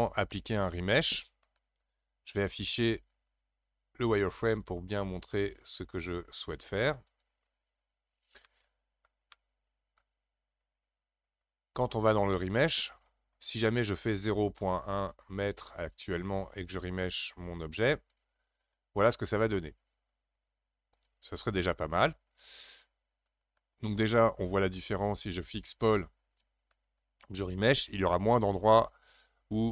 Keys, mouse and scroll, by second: 5.2-8.0 drag, 8.0 scroll up 2, 8.4-12.4 middle drag, 12.5-15.6 drag, 23.3 ctrl+z, 24.8-27.8 drag, 28.5-29.7 scroll up 1.